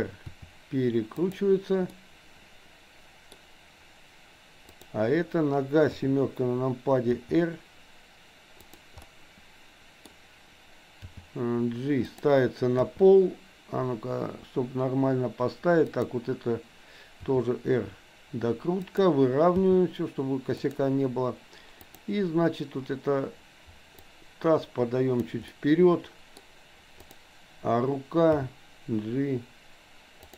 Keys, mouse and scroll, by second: 0.3 r, 1.9-3.4 middle drag, 4.7 click, 5.9 KP_7, 7.2 r, 9.0-10.0 middle drag, 10.0-11.2 scroll down 1, 11.2 g, 12.8 KP_3, 15.8 click, 17.2 r, 19.5 g, 21.8 click, 24.2-25.3 drag, 25.4-26.4 middle drag, 27.0 click, 28.3 g.